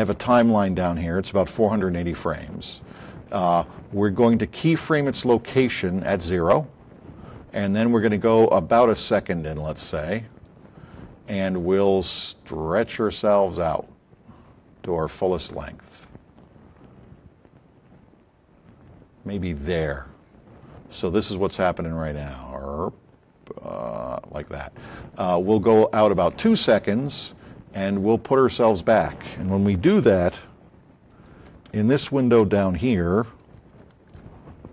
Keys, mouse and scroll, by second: 21.3-22.4 drag, 29.8 a, 31.6 a, 33.0 middle click, 33.4 middle click, 33.7 a.